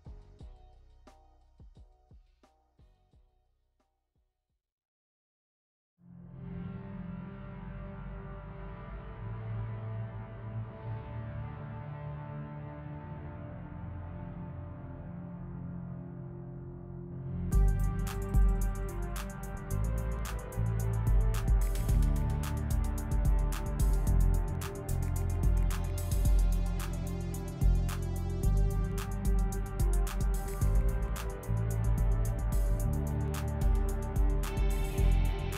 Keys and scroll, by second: 9.5 l.